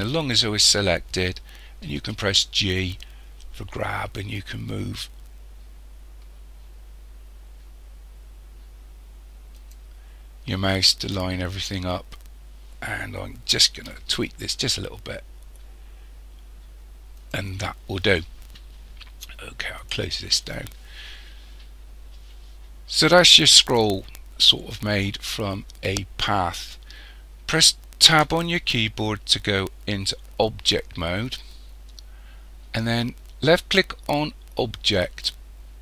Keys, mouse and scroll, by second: 2.0 g, 10.5-11.3 scroll down 8, 11.3-14.1 scroll up 1, 14.1 r, 17.7-18.2 scroll down 5, 19.8 click, 20.7-21.2 scroll up 1, 21.2-21.9 scroll up 3, 21.9-24.3 scroll up 1, 28.2 Tab, 31.6-34.9 scroll down 3, 35.0 click.